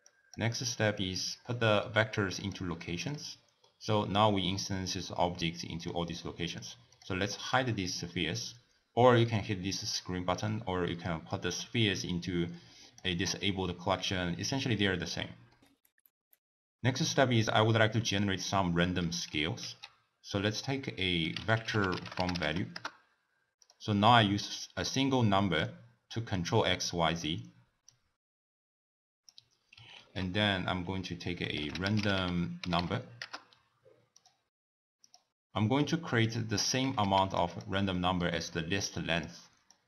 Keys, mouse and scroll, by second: 0.1 click, 1.0 click, 2.8-5.8 middle drag, 5.8 click, 6.9 click, 7.4 click, 11.3 click, 15.5 middle click, 15.9 click, 19.6 ctrl+a, 25.5-29.9 drag, 29.9 ctrl+a, 35.1 drag, 35.6-36.3 middle drag, 36.3 click, 36.8 g, 37.5 click, 37.9-38.9 middle drag, 38.9 click, 39.7 drag.